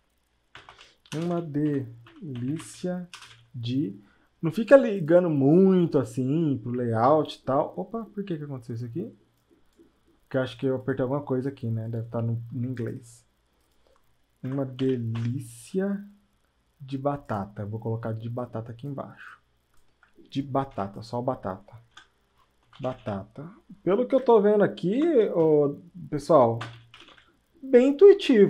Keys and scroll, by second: 0.6-3.1 typing, 5.6 typing, 14.4 BackSpace, 14.6 BackSpace, 14.8 [, 15.1 i, 23.0 ctrl+a, 24.1 BackSpace, 25.4 Caps_Lock, 26.6-27.4 typing.